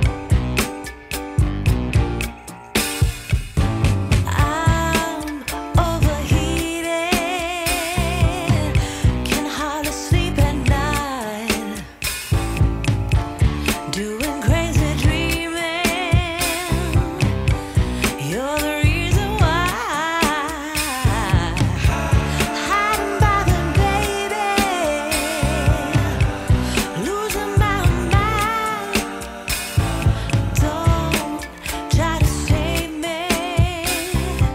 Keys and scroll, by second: 0.5 F4, 4.0 alt+q, 6.2 Delete, 8.7 F4, 14.0 F4, 16.9 F4, 18.7 F4, 20.2 4, 20.4 F4, 21.1 4, 23.5 F4, 26.4 F4, 32.8 F4.